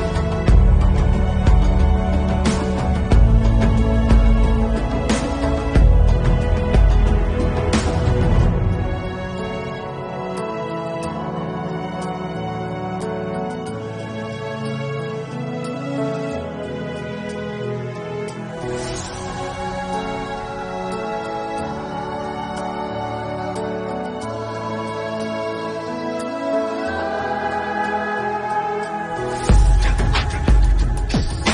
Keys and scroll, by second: 1.3 ctrl+alt+z, 3.3 ctrl+alt+z, 3.7 7, 3.8 [, 5.3 ], 8.6 ctrl+alt+z, 10.6 ctrl+s, 13.5 ], 18.6 ctrl+s, 20.3 ctrl+s, 21.4 ctrl+s, 23.5 4, 23.6 ], 24.3 ], 26.0 ctrl+s, 28.2 ].